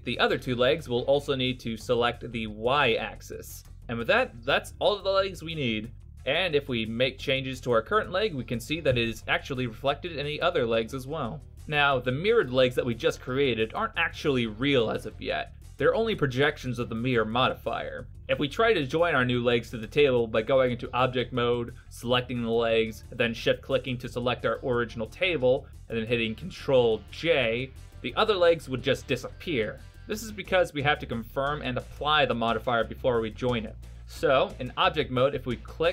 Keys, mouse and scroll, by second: 2.9 click, 3.8 middle click, 6.0 click, 6.3 right click, 6.8 g, 9.1 right click, 9.4 g, 12.3 click, 12.8 middle click, 13.3 Tab, 14.4 right click, 15.5 shift+right click, 17.7 ctrl+j, 19.5 middle click, 27.4 middle click, 30.1 ctrl+z, 31.5 right click, 32.3 right click, 34.8 click.